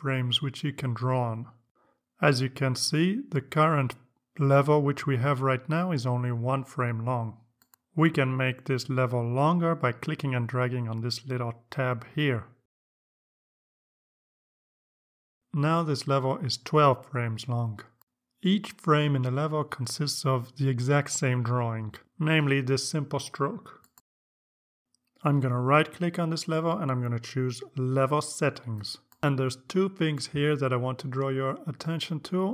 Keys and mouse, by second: 1.2 click, 2.1 click, 2.7 click, 3.3 click, 4.0 click, 4.6 click, 5.2 click, 6.4 click, 13.0-16.5 drag, 18.2 click, 18.9 click, 19.5 click, 25.6 right click, 27.9 click.